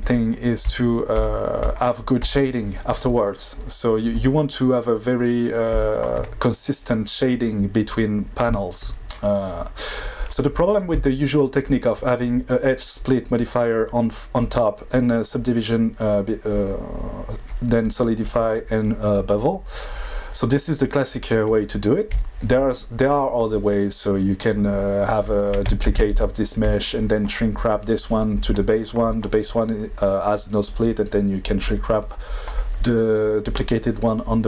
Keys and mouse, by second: 0.3 click, 0.6 click, 1.1-2.7 drag, 4.7 middle click, 5.7 shift+middle click, 11.7 click, 14.5 drag, 17.4 click, 18.3 click, 18.7 click, 21.5 drag, 22.1 click, 25.8 shift+d.